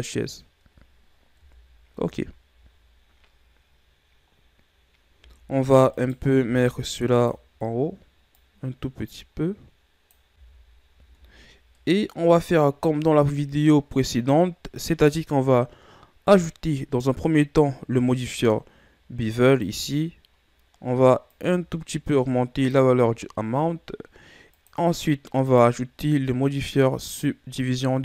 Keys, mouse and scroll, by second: 1.4 KP_1, 2.0 z, 4.2-5.2 scroll up 2, 5.2 z, 5.9 right click, 6.5 b, 8.3-10.4 drag, 10.4 z, 11.1 Tab, 11.7-14.8 middle drag, 16.3-19.5 drag, 21.3-24.4 drag, 24.5-28.0 drag.